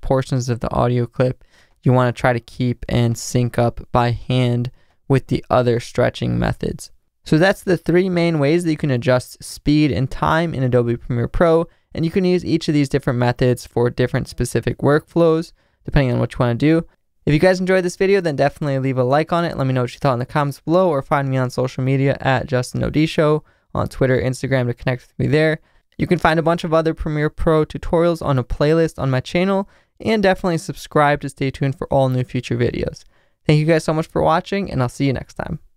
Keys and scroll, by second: 1.0 v, 5.1 r.